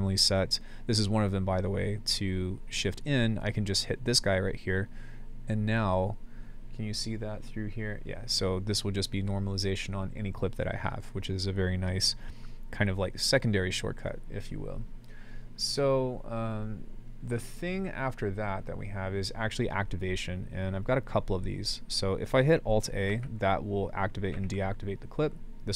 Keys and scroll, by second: 3.0 super+z, 23.1 alt+a, 24.3 alt+a.